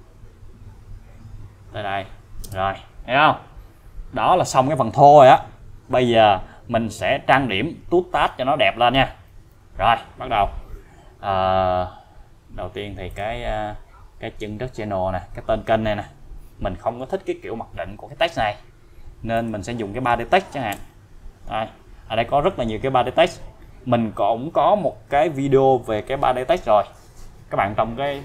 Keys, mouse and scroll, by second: 2.4 space, 10.6-11.2 scroll up 1, 13.0 scroll down 1, 13.1 click, 19.4 click, 20.8 BackSpace, 22.1 scroll down 1, 23.1-23.4 scroll down 1.